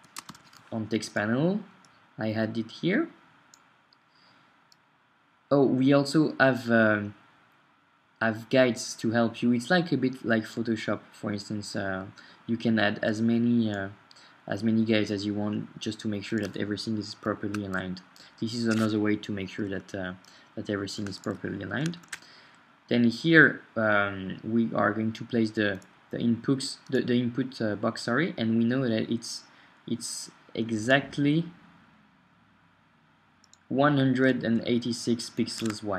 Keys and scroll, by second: 0.0-2.6 typing, 22.0 super+Tab, 35.6 super+Tab.